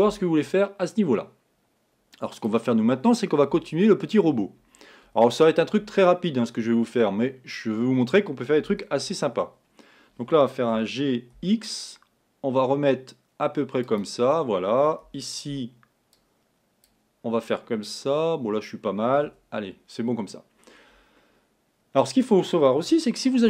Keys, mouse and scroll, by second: 2.5-5.4 drag, 9.0 Tab, 10.8 g, 15.1 a, 15.5 b, 19.4 Escape.